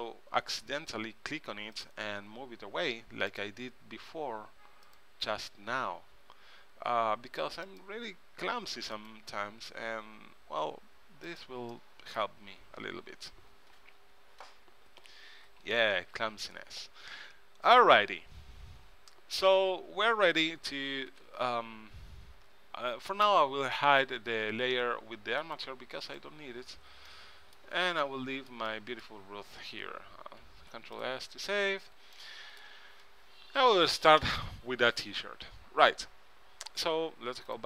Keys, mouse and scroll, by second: 1.9-3.7 drag, 2.8 r, 5.0-6.6 drag, 6.2 r, 9.4 r, 16.1 KP_3, 19.6-21.3 drag, 21.3 ctrl+Tab, 25.5-28.1 middle drag, 28.2-29.8 middle drag, 29.8 KP_3, 30.7 ctrl+s.